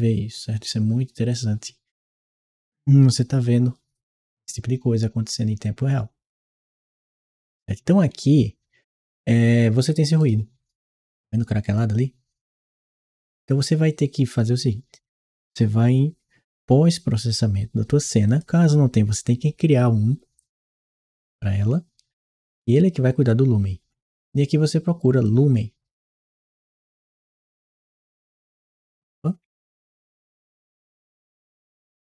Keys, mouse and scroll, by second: 6.7-10.0 right drag, 8.0 a, 8.4 s, 9.7 a, 18.1 click, 23.7 scroll down 1, 25.1 click, 27.2 w, 30.0 BackSpace, 31.3 w, 32.0 BackSpace.